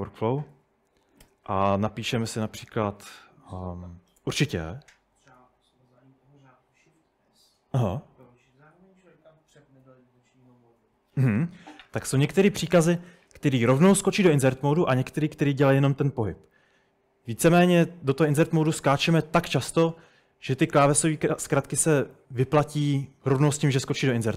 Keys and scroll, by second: 0.0-4.7 typing, 7.9 Escape.